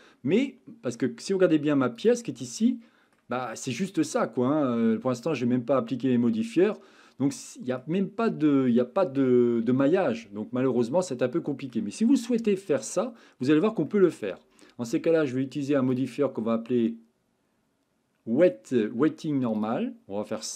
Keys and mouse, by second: 2.3 Tab, 2.7 middle click, 3.9-7.8 middle drag, 8.3 Tab, 10.8-11.7 middle drag, 12.6-12.9 shift+middle drag, 13.2-13.6 middle drag, 13.9-14.2 shift+middle drag, 16.0-19.7 drag, 20.3-20.5 middle drag.